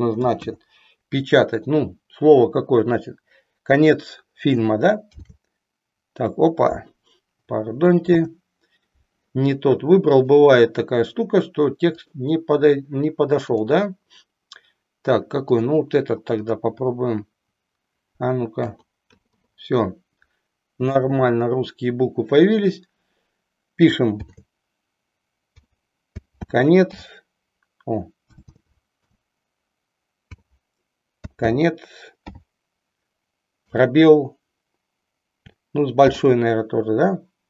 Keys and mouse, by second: 0.2 BackSpace, 0.4 BackSpace, 5.1 shift+r, 8.1 BackSpace, 18.6 u, 19.1 i, 19.3 i, 20.7 BackSpace, 21.2 BackSpace, 24.2 shift+r, 25.4 o, 26.1 y, 26.6 t, 26.9 w, 28.2 BackSpace, 28.6 BackSpace, 28.7 BackSpace, 29.1 BackSpace, 30.2 j, 31.2 y, 31.4 t, 32.2 w, 33.6 space, 35.9 shift+a.